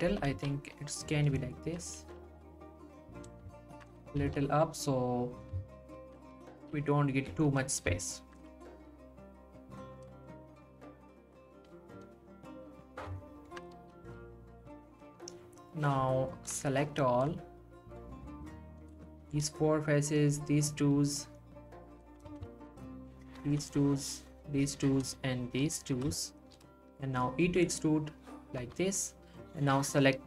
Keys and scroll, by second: 0.1 g, 2.0 g, 4.0 g, 6.3 g, 8.5 g, 13.8 g, 22.4 ctrl+z, 22.5 ctrl+z, 27.5 e.